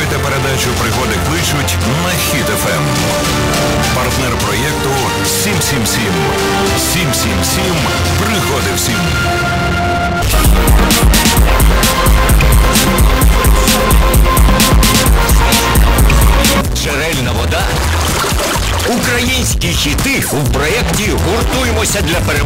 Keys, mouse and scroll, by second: 16.5 Page_Down.